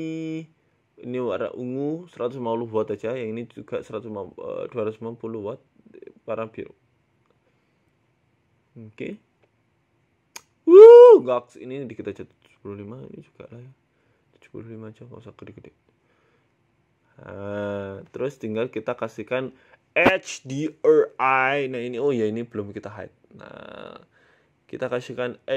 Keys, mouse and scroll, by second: 0.5 middle click, 1.3 click, 3.1 right click, 3.7 click, 7.6 click, 7.6 right click, 8.1 middle click, 8.6 scroll down 1, 8.6 middle click, 9.1 z, 11.6 click, 14.2 right click, 15.2 click, 17.0 KP_0, 17.9 scroll down 8, 20.1 scroll up 2, 21.1 right click, 21.8 right click, 23.1 click, 23.4 click, 24.9 shift+a.